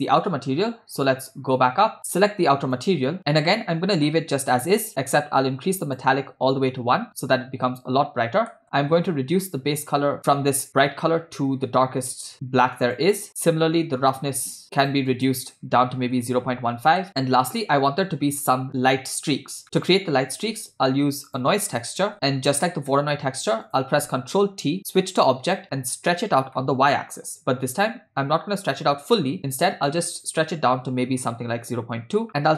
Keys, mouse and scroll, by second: 0.5 scroll up 1, 0.7 scroll down 1, 0.9 scroll down 1, 1.3 scroll down 1, 2.8 click, 3.3 scroll down 3, 3.4 middle click, 4.4-4.9 scroll up 2, 5.0-6.2 drag, 8.5 middle click, 9.4 click, 13.4-15.1 drag, 15.2-17.1 drag, 19.6 middle click, 20.5 shift+a, 22.9 middle click, 23.7 click, 24.7 ctrl+t, 25.5-26.1 drag, 26.6-27.0 middle drag, 27.3-28.4 scroll down 1, 29.4 click, 30.1-32.0 drag, 32.4 middle click.